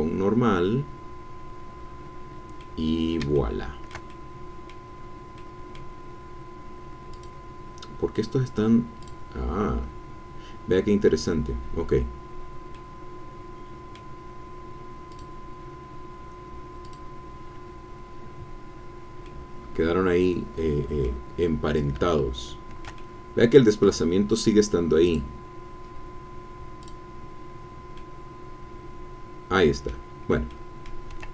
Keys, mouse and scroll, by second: 2.6 click, 3.2-4.9 shift+middle drag, 5.4 middle click, 7.1 click, 9.0 click, 12.7-14.4 drag, 15.1 click, 16.8 click, 19.3-21.2 drag, 21.2 middle click, 21.5-22.1 scroll up 1, 22.1 shift+click, 22.1-24.0 shift+middle drag, 25.0 click, 26.8 click, 27.9 middle click, 28.2-30.1 drag, 30.5 click.